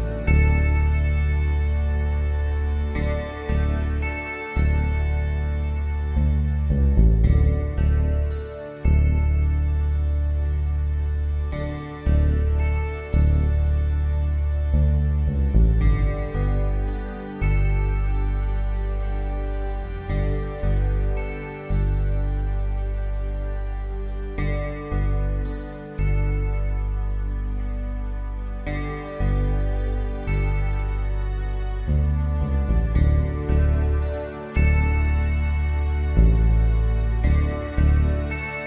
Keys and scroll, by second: 36.6 Return.